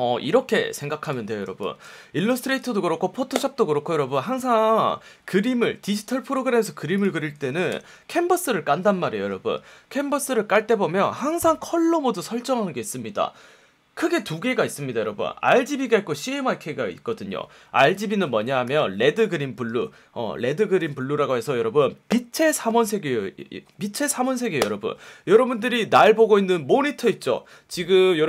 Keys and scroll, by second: 1.4 space, 7.7 super+n, 10.5 F1, 19.6 F1.